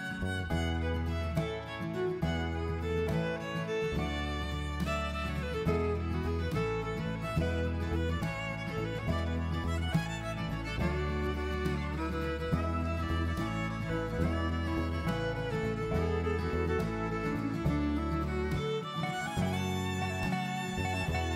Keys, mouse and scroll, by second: 2.5 alt+e, 6.5 middle click, 10.7-11.2 scroll down 2, 11.2 middle click, 13.1 s, 15.2 middle click, 16.6 click, 19.2 middle click.